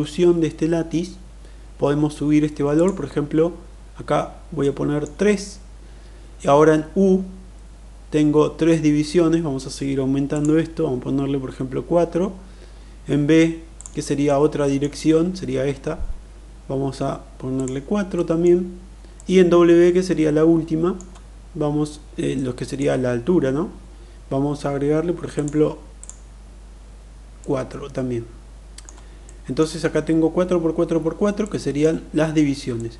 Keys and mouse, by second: 2.7 click, 4.6 middle click, 10.3 click, 13.7 click, 14.2 middle click, 17.4 click, 18.1 middle click, 19.0-21.0 middle drag, 22.3-22.8 middle drag, 25.2 click, 26.0 click, 27.3-28.8 middle drag, 29.1 middle click, 31.4-31.8 middle drag, 32.7-32.9 middle drag.